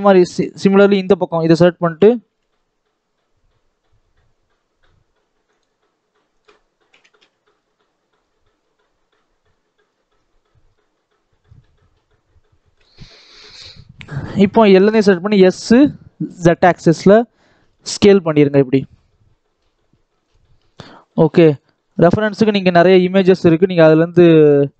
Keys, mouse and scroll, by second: 0.8 KP_7, 1.8 g, 6.2 click, 6.8 g, 12.9 scroll down 2, 13.0 middle click, 13.6-13.9 scroll up 1, 13.9 middle click, 14.4 a, 15.1 s, 17.7-21.6 middle drag.